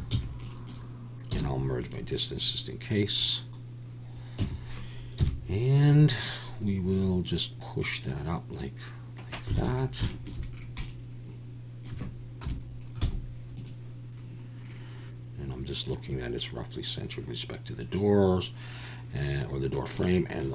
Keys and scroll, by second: 0.1 a, 1.3 m, 5.2 Tab, 5.2 KP_1, 9.6 alt+a, 12.4 KP_7, 13.0 z.